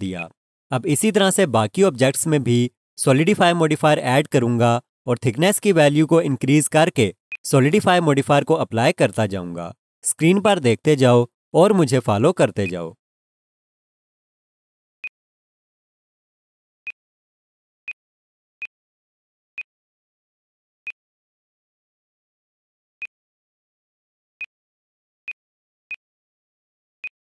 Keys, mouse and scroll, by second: 7.3 alt+click, 10.4 click.